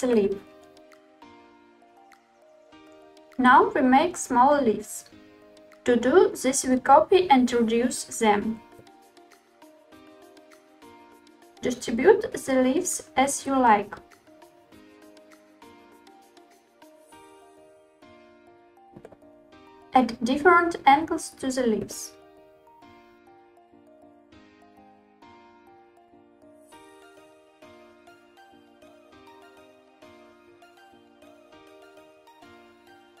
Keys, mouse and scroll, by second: 2.5 ctrl+click, 2.5 shift+d, 3.0 r, 4.0 ctrl+click, 4.2 shift+d, 4.5 r, 5.5 ctrl+drag, 8.6 shift+d, 9.8 s, 11.6 click, 11.8 r, 13.2 click, 13.6-16.5 typing, 14.4 click, 15.2 click, 17.0 click, 17.2-18.8 middle drag, 19.0 click, 20.1-21.3 middle drag, 20.8 click, 21.6 r, 24.0 click, 24.2 r, 24.8 z, 25.7 click, 25.8-26.4 middle drag, 26.4 click, 26.7 r, 27.8 click, 27.8 middle click, 27.9-33.2 typing, 28.4 middle click, 28.4 click, 28.6-29.2 middle drag, 29.9 click, 30.6 middle drag, 31.0 click, 31.1-31.6 middle drag, 31.8 middle click, 31.8 click, 32.2-32.5 shift+middle drag, 32.2 click, 32.6 click.